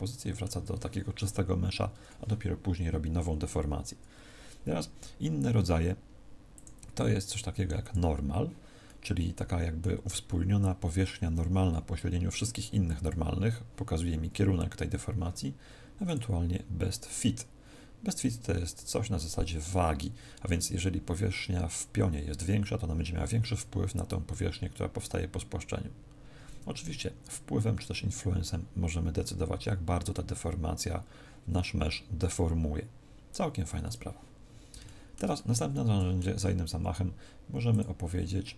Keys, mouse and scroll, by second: 6.5 click, 8.8 middle click, 16.0 click, 27.3 click, 34.3-34.8 scroll down 4, 34.7 shift+middle click, 35.3 middle click, 37.6 click.